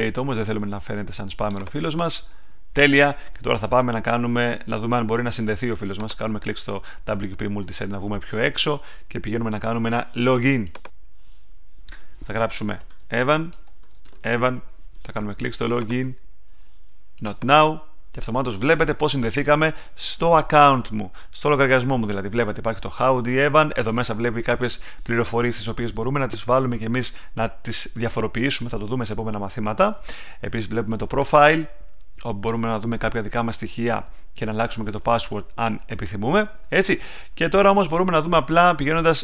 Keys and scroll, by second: 3.6 super+Tab, 12.6-13.7 typing.